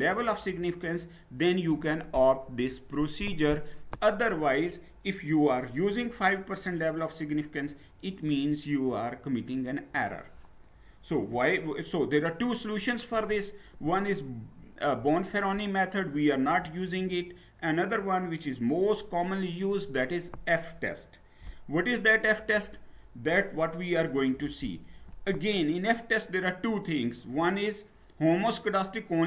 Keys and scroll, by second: 9.9 Down, 19.8 Down, 22.4 Down.